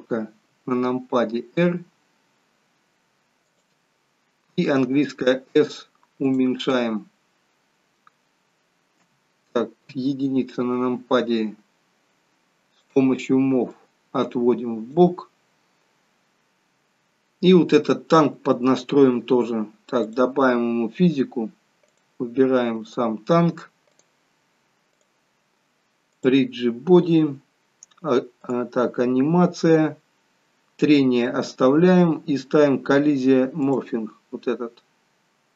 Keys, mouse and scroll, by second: 0.4 r, 4.8 s, 6.8 middle click, 9.0 KP_3, 9.8 KP_1, 12.9 click, 13.7 click, 20.2 click, 21.9 click, 22.9 click, 24.0 click, 25.0 click, 26.1 click, 27.1-28.3 scroll down 2, 28.3 scroll down 1, 28.5 click, 29.3-30.3 scroll down 2, 31.2-32.2 scroll down 5, 33.8 click.